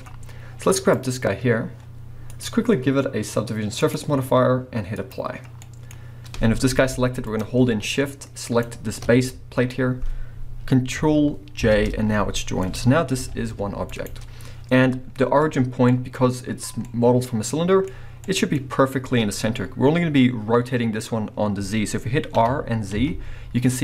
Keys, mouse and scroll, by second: 0.1-0.5 scroll up 1, 0.7 click, 2.3-5.6 drag, 5.6-7.4 middle drag, 6.0-6.4 scroll up 1, 6.7 g, 7.4 right click, 8.4 shift+click, 9.3-12.7 middle drag, 9.7-11.2 scroll up 2, 11.2-11.7 scroll up 1, 11.7 ctrl+j, 12.7 click, 12.7 middle click, 12.9 scroll down 1, 13.1 g, 14.0 right click, 15.0 scroll up 1, 16.1-23.8 middle drag, 17.9-18.3 scroll up 2, 19.3-21.8 scroll down 2, 21.8-22.4 scroll down 1, 22.4 r.